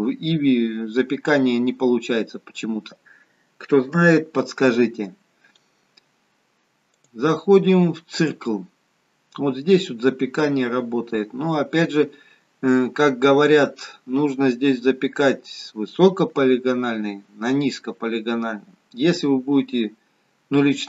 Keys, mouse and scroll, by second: 7.0 click, 9.3-13.0 scroll down 6.